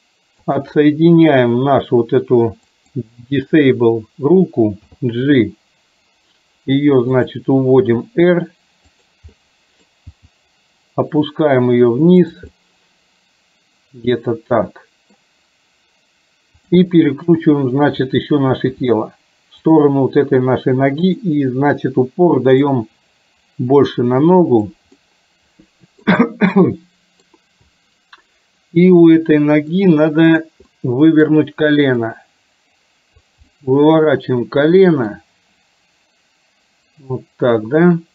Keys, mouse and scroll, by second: 0.6 click, 2.8 click, 4.9 g, 8.1 r, 9.4 middle click, 10.1 g, 12.6-15.3 middle drag, 17.4 KP_7, 18.8 r, 21.2 click, 22.8-24.8 drag, 24.9-26.1 middle drag, 26.7 scroll up 1, 26.8-27.3 middle drag, 29.2-29.7 middle drag, 29.7 scroll down 1, 30.4 click, 30.7 middle click, 32.3-33.3 drag, 33.4-35.2 middle drag.